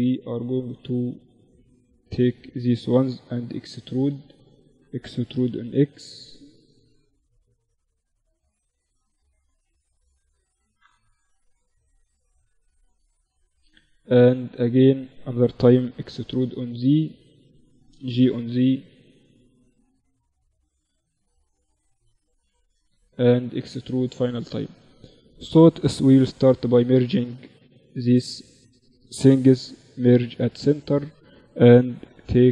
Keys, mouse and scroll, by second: 2.0 e, 4.0 e, 6.7-10.4 drag, 9.4-11.4 right drag, 10.4 g, 13.3-15.7 right drag, 14.5 e, 16.8 g, 18.6-20.0 drag, 21.4 e, 23.6-25.0 right drag, 25.0 click, 25.2 alt+m, 26.6-31.6 drag, 29.1 alt+m, 30.6 g.